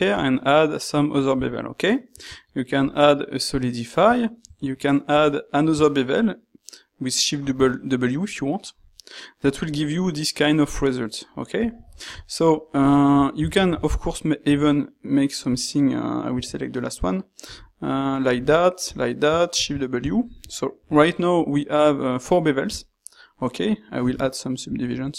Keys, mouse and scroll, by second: 13.5 ctrl+shift+q.